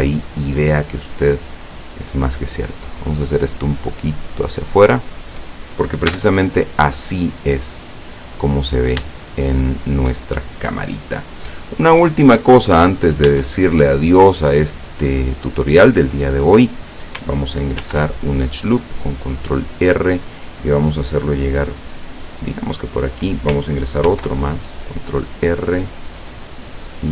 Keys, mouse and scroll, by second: 0.1-1.4 shift+middle drag, 2.5-4.7 drag, 5.1 scroll down 2, 6.2 Tab, 6.6-8.0 middle drag, 8.1 scroll down 2, 9.4-10.3 shift+middle drag, 10.4 shift+middle click, 11.4-12.1 shift+middle drag, 12.3 shift+scroll up 2, 12.6 right click, 13.4 Tab, 17.9 ctrl+r, 18.6 click, 22.8 click, 24.1 ctrl+r.